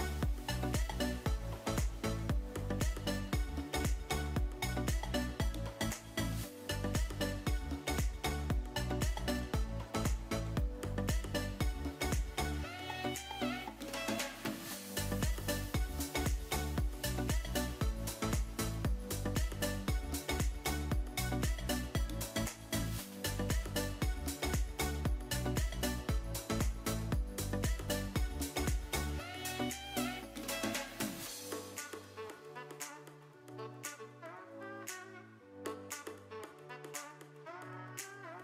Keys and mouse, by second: 0.1 click, 0.8 Tab, 1.9 KP_3, 3.1 g, 4.3 drag, 4.6 r, 5.1 click, 6.2 ctrl+space, 7.2-8.7 middle drag, 9.6 r, 10.4 click, 10.4 r, 10.7 g, 11.3 drag, 11.7-12.7 middle drag, 12.9 r, 13.9 drag, 14.2-15.5 middle drag, 15.6-16.1 middle drag, 16.3 Tab, 17.6 middle click, 18.3 click, 18.7 middle click, 21.1 middle click, 21.8 ctrl+KP_Add, 23.7 middle click, 24.5 r, 25.0 click, 25.1 g, 26.0 click, 26.6 Tab, 27.1 click, 27.6 middle click, 28.1 r, 28.2 r, 29.1 click, 29.5 r, 29.7 r, 30.1 click, 30.7 middle click, 31.4 r, 31.5 r, 32.1 click, 32.6 r, 33.0 click, 33.3 r, 33.5 r, 35.8 click, 36.6 click, 37.0 g, 38.1 click.